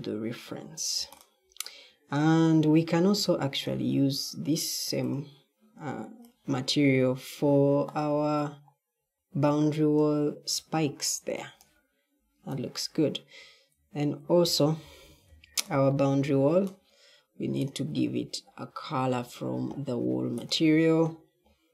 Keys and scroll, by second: 14.3 w, 14.7 w, 15.2 w.